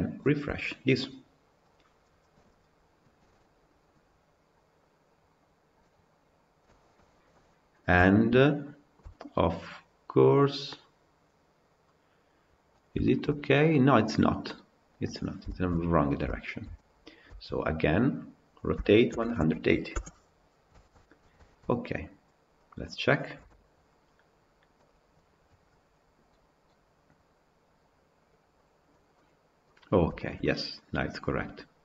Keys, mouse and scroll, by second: 0.3 KP_Decimal, 6.0-6.6 scroll up 2, 6.6-12.1 shift+middle drag, 12.6 scroll down 2, 12.9-13.6 shift+middle drag, 13.6-14.8 scroll up 1, 14.8-15.3 scroll down 7, 15.3-17.0 shift+middle drag, 17.0 click, 17.3 Tab, 18.7 r, 20.7 Tab, 21.3 shift+middle click, 22.0-22.5 scroll up 2, 22.5 click, 23.2 KP_Decimal, 29.0-29.6 middle drag, 29.6-30.0 scroll up 2, 30.0-31.8 shift+middle drag.